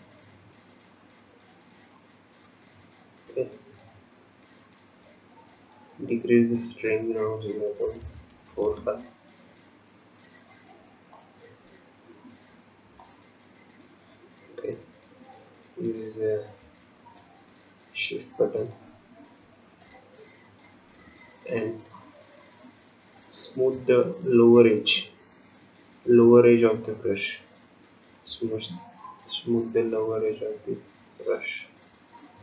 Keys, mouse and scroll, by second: 2.6-3.6 scroll down 8, 4.0-4.6 scroll up 5, 6.4 scroll up 2, 6.6 click, 13.7 scroll up 1, 13.9-14.5 scroll down 3, 14.5-14.9 scroll up 2, 15.3 scroll up 2, 15.3 scroll down 1, 16.7 shift+middle click, 18.5-19.0 scroll up 1, 19.9 shift+click, 28.8 scroll down 1, 29.8 shift+click.